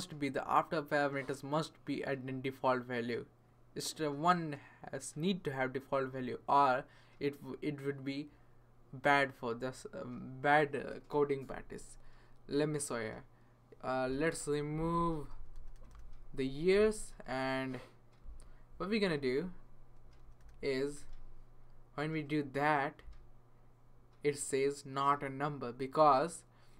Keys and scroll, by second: 14.9 Left, 15.3 BackSpace, 15.5 BackSpace, 20.0 BackSpace, 20.2 BackSpace, 20.4 BackSpace, 20.9 BackSpace.